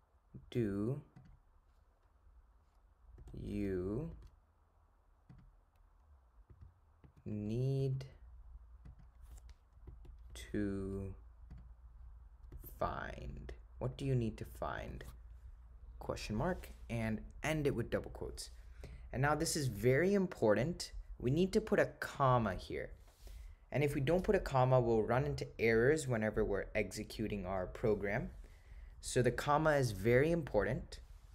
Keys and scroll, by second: 1.2 0, 3.3 1, 3.6 7, 4.2 5, 5.4 0, 9.0 0, 10.0 4, 10.4 7, 11.6 0, 22.2 ,.